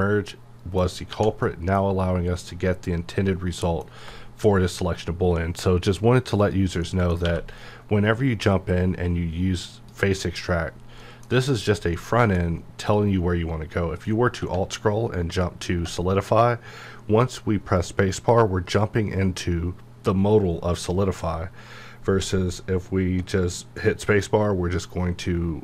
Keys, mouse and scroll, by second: 1.1 1, 1.4-6.1 middle drag, 6.4 click, 6.8 middle click, 7.2 q, 9.7 click, 11.0 middle click, 11.6 click, 11.9 middle click, 12.8 click, 14.3 x, 15.3-15.9 alt+scroll up 1, 22.6 alt+Num_Lock, 22.6-22.9 alt+scroll up 1.